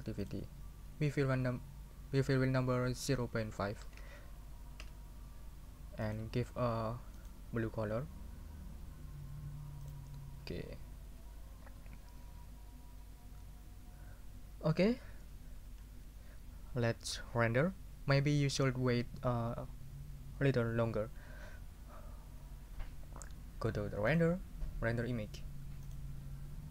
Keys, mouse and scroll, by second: 0.2 middle click, 3.0 o, 4.0 5, 4.8 Return, 6.0 scroll down 1, 7.2 scroll down 1, 8.4 scroll up 1, 9.8 scroll down 1, 10.3 scroll up 2, 11.1 scroll up 1, 24.1 click, 25.8 click.